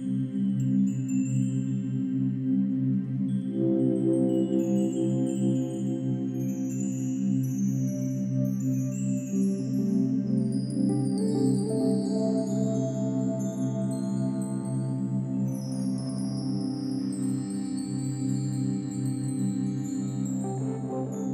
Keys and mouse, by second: 0.0 Escape, 0.6-3.8 alt+drag, 5.2 click, 5.6 drag, 8.2 click, 9.2-9.8 alt+drag, 10.0-11.1 alt+drag, 12.2-13.2 drag, 13.2 ctrl+s, 13.7-15.4 ctrl+alt+drag, 15.7-21.3 drag.